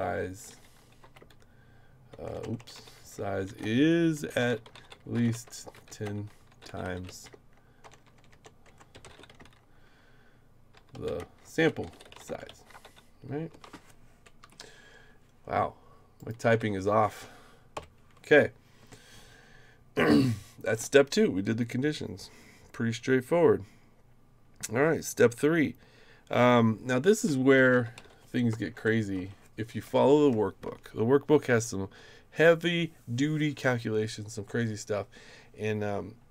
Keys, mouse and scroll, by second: 0.0-13.3 typing, 13.5 Return, 14.4 Up, 16.2 click, 16.5 e, 17.7 Return, 20.2 click, 27.4-28.7 typing, 29.2 Return, 29.8 Right.